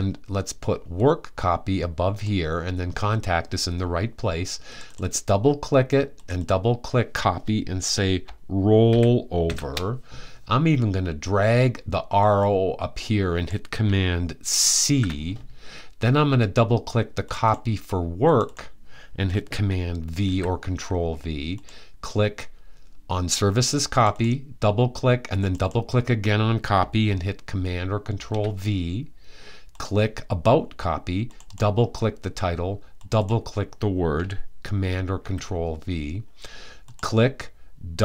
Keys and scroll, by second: 8.6-9.1 typing, 14.5 super+c, 19.9 super+v, 27.8 super+v, 34.9 super+v.